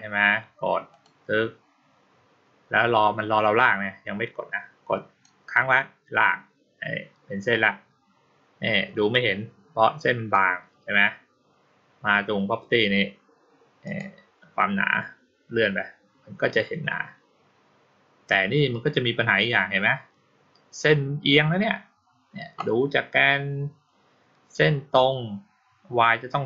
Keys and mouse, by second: 0.8 click, 5.1-10.2 drag, 13.7 click, 14.7-17.7 middle drag.